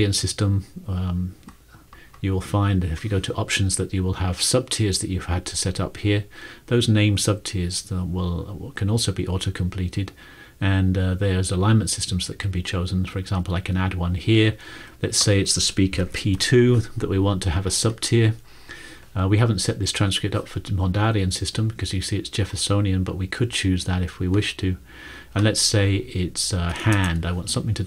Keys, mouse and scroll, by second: 15.8-16.8 typing, 26.7-27.5 typing.